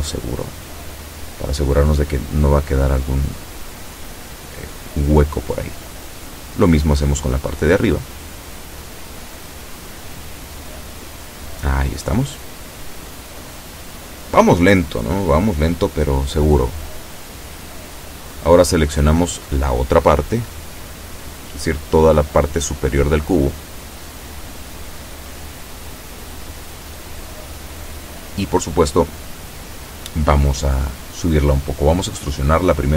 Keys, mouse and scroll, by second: 0.8 a, 1.6 b, 2.9-4.6 drag, 5.7-11.3 drag, 16.4 b, 17.7-20.0 drag, 29.4 e.